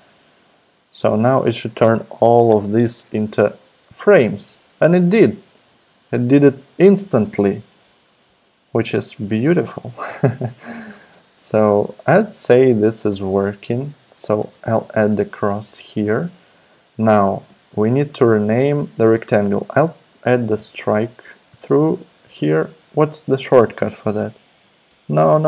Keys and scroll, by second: 2.5 alt+super+p, 5.7 super+z, 11.1-13.7 typing, 14.4 Return, 20.5 shift+super+x, 22.3 shift+super+s, 25.3 ↺.